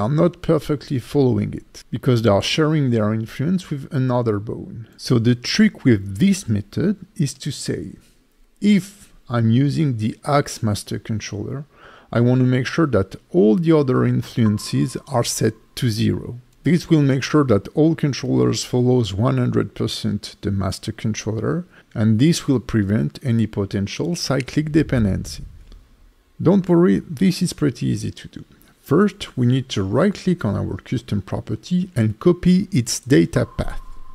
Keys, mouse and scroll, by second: 0.6 right click, 1.3 click, 1.5 click, 1.9 click, 25.4 click, 26.1 click, 27.6 click, 28.4-31.6 scroll down 4, 31.6 right click.